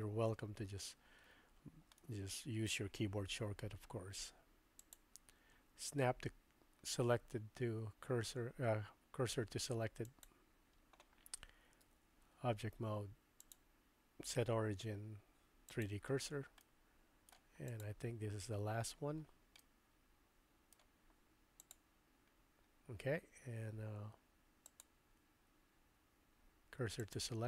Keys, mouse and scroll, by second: 2.0 shift+middle click, 4.8-10.3 drag, 11.9 Tab, 13.4-15.9 drag, 16.6 middle click, 17.7 click, 18.4 Tab, 19.6-20.8 middle drag, 24.6-27.2 drag.